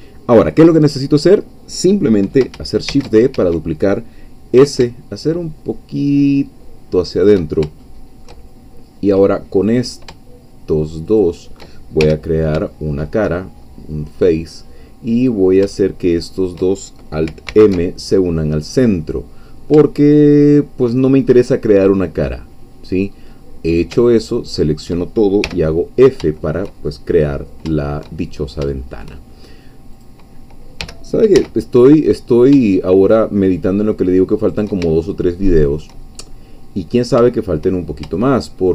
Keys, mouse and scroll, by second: 2.9 shift+d, 3.4 shift+Escape, 4.6 s, 7.2 shift+click, 7.9 shift+middle click, 9.8 click, 11.2 shift+click, 12.0 shift+f, 12.7 shift+middle click, 13.6-14.0 shift+scroll up 3, 15.3 click, 16.1 shift+click, 17.5 alt+m, 18.6 click, 19.5 scroll down 2, 19.9-21.2 shift+middle drag, 21.2-21.7 shift+scroll up 3, 22.0 scroll down 2, 23.0-23.4 scroll down 2, 24.3 alt+shift+click, 25.4 f, 26.0-26.6 scroll down 2, 27.3 scroll up 2, 27.8 shift+click, 28.3-28.6 shift+scroll up 3, 28.7 shift+click, 30.0 click, 30.8 g, 31.4 z, 34.4 shift+click, 35.0 shift+middle click, 37.5 shift+click, 37.8 shift+scroll down 2.